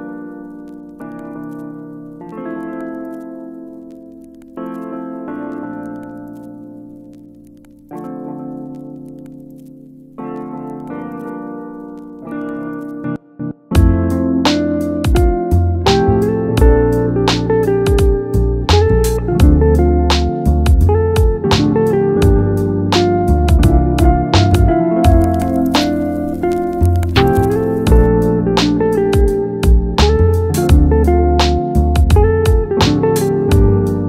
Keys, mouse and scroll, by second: 2.0 shift+a, 7.4-7.9 scroll down 3, 7.9-10.2 middle drag, 10.2-16.2 drag, 16.2-19.8 scroll down 6, 19.8 click, 20.8-22.3 scroll down 2, 22.3 click, 23.2-25.2 scroll down 4, 25.2 scroll down 1, 29.6-32.6 drag.